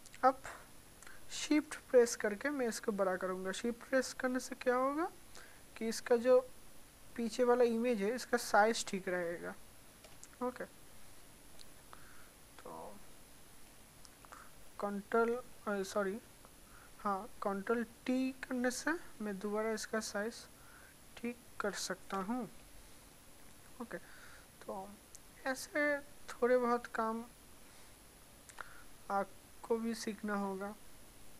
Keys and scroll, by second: 17.8 ctrl+r.